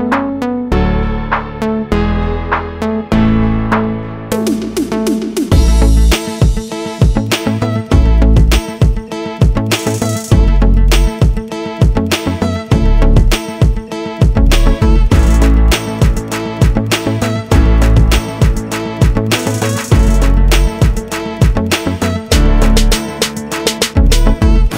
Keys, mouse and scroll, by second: 0.1 click, 2.5 click, 4.7 click, 6.4 click, 7.5 ctrl+click, 9.1 click, 12.3-12.8 scroll down 1, 13.7 click, 14.8 click, 18.8 click, 20.5 click, 21.1 F4, 22.1 click, 23.2 F9.